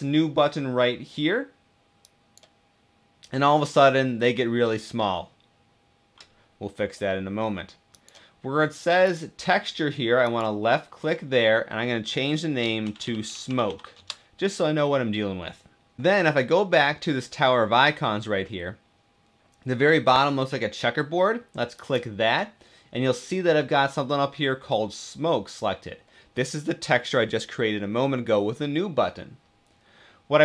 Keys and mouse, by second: 7.7-8.9 drag, 10.0-15.0 drag, 12.7 shift+middle click, 21.6 click.